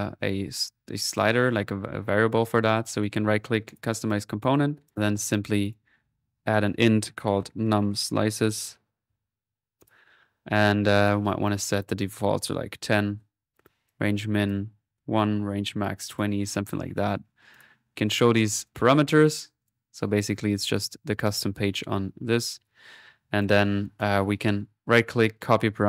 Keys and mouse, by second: 3.7 click, 5.0-6.6 drag, 7.1-9.1 typing, 9.8 shift+click, 11.4-13.1 drag, 12.8-15.7 typing, 13.7-15.0 drag, 16.1-18.0 drag, 18.7 click, 20.0 middle click, 20.7-22.6 drag, 23.4-24.5 drag, 24.6 right click, 25.3 click.